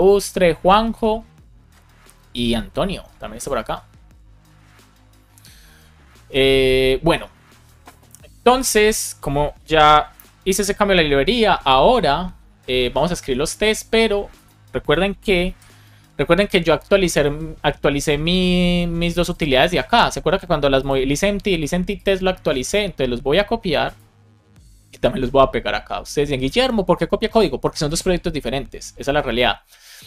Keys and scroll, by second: 10.0 super+Left, 15.4 shift+super+e.